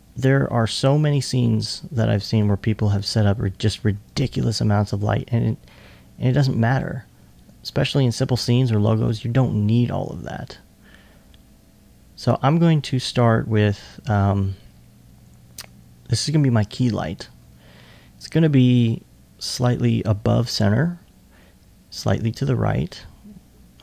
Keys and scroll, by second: 0.5-1.3 typing, 7.6 2, 8.8 2.